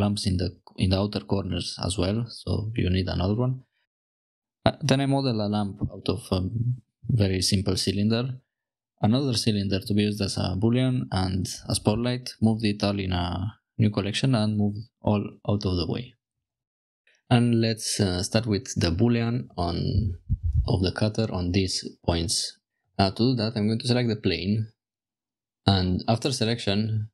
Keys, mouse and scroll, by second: 0.0 Tab, 0.2-3.3 typing, 0.2 click, 0.6 click, 1.8 Return, 3.4 Return, 3.6 click, 3.7 Tab, 3.7-4.1 drag, 4.3 click, 5.0 click, 5.3 middle click, 5.3 click, 5.6 shift+a, 6.0 click, 6.6 drag, 7.1 s, 7.8 click, 8.1 g, 8.7 click, 8.7 z, 8.9 click, 9.2 t, 9.6 drag, 10.5 shift+click, 11.4 m, 14.1 middle click, 14.9 click, 15.1 click, 15.9 g, 15.9 x, 16.4 click, 18.4 click, 19.8 click, 22.7 Tab, 22.7 click, 22.7 1.